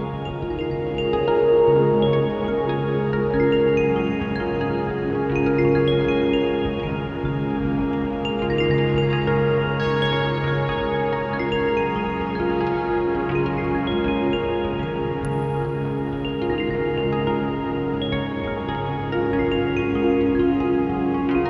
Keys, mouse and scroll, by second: 2.9 click, 3.4 click, 6.0 Delete, 6.5 click, 7.0 shift+d, 8.3 click, 11.8 click, 14.8 ctrl+t, 15.5 click, 17.5 click.